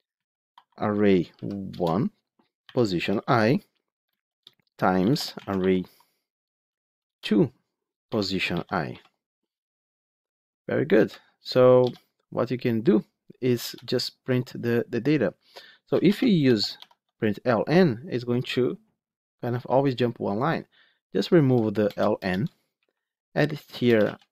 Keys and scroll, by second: 1.6 Return, 7.0 Return, 16.8 Tab.